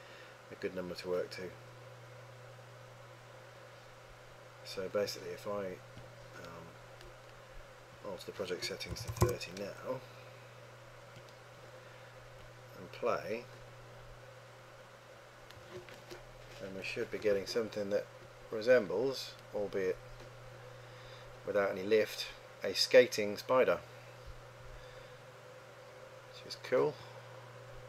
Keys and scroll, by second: 9.0 KP_3, 9.2 KP_0, 9.3 Return.